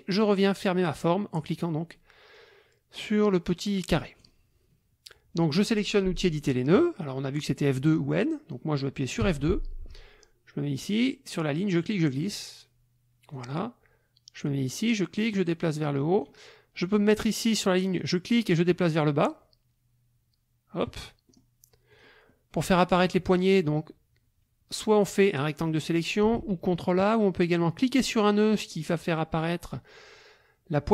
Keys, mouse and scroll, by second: 4.2 click, 9.2 F2, 11.6-13.5 drag, 14.7-16.4 drag, 18.0-21.0 drag, 21.3 middle click, 21.9 click, 22.3 click, 23.2 KP_Subtract, 25.0 click, 25.8 click, 26.4 ctrl+a, 27.0 click, 27.9 click.